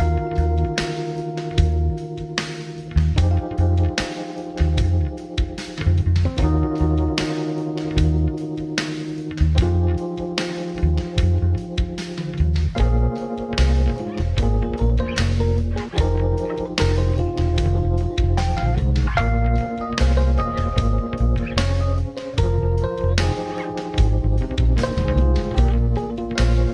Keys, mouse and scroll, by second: 0.0 click, 0.6-2.9 middle drag, 5.9 click, 10.7 ctrl+space, 10.8-16.4 drag.